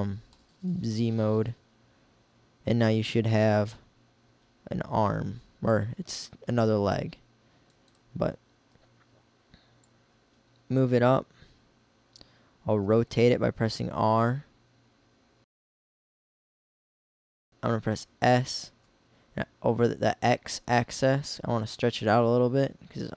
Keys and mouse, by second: 7.4 click, 8.3 KP_1, 12.8 r, 16.7 r, 17.3 s.